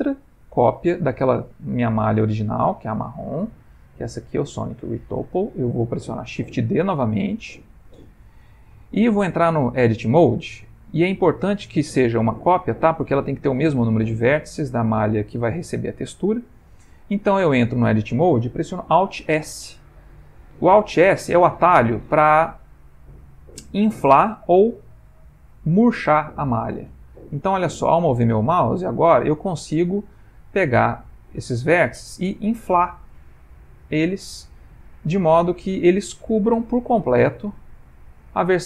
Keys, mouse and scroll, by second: 0.0 click, 1.0 click, 2.5 click, 3.4 g, 7.6 shift+d, 9.8 Tab, 10.4 middle click, 13.0 middle click, 14.2 middle click, 15.2 middle click, 17.4 middle click, 20.3 alt+s, 34.2 middle click, 37.6 click.